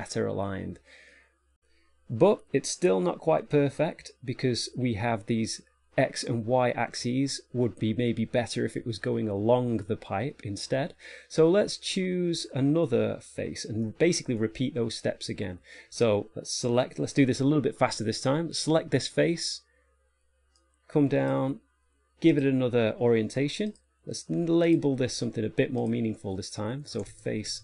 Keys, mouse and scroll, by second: 0.5 middle click, 1.6 shift+middle click, 1.6 scroll down 10, 11.4 middle click, 13.2-13.7 scroll up 1, 13.7 middle click, 16.0 Tab, 18.4 right click, 20.9 click, 22.6 click, 24.0 click, 25.6-26.1 scroll down 1, 26.1 click, 26.1-27.3 scroll down 2.